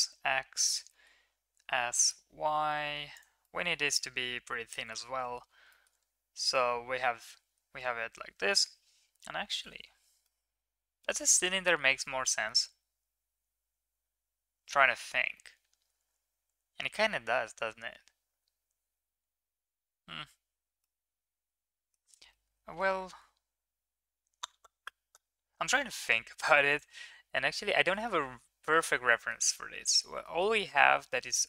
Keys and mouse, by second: 1.0 middle click, 1.5 s, 3.4-5.0 middle drag, 5.8 middle click, 6.7-7.2 middle drag, 10.4-12.0 middle drag, 20.9-22.0 middle drag, 22.4-22.9 middle drag.